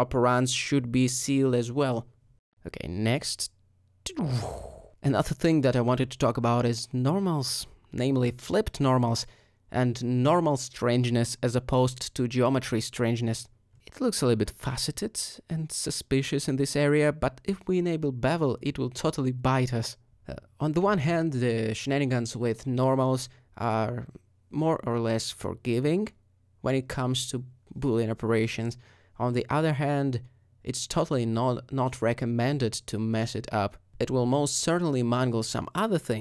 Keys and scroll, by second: 2.9 r, 6.6 alt+a, 8.1 alt+shift+;, 23.7 alt+Tab, 24.1 alt+Tab, 24.4 alt+a.